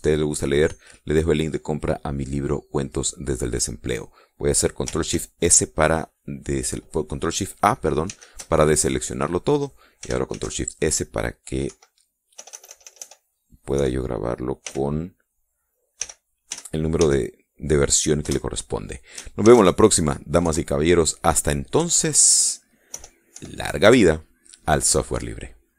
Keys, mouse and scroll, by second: 8.9 ctrl+shift+a, 11.1 ctrl+shift+s, 12.5 Right, 13.2 BackSpace, 14.6 KP_6, 15.5 ., 16.8 k, 17.3 r, 17.8 a, 19.1 Return, 20.3 ctrl+shift+s, 21.3 Tab, 22.6 Left, 23.7 BackSpace, 24.2 KP_6, 24.7 KP_Enter.